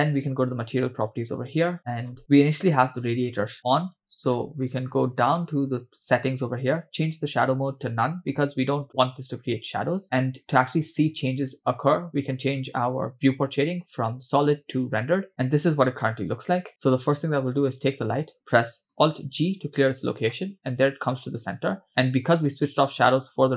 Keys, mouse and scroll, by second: 0.6 click, 2.1-3.4 scroll down 2, 2.2-3.4 scroll up 8, 4.3-5.1 scroll down 6, 7.0 scroll down 2, 7.1-7.9 drag, 16.0-16.7 scroll up 6, 16.7-17.6 scroll down 3, 17.6 click, 19.4 alt+g, 21.6-23.5 scroll up 7.